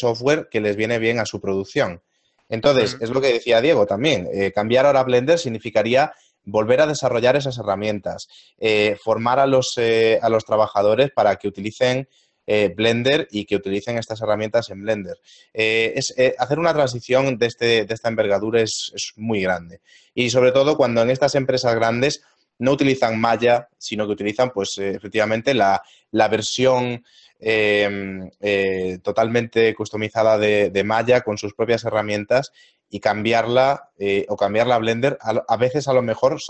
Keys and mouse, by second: 23.4 click.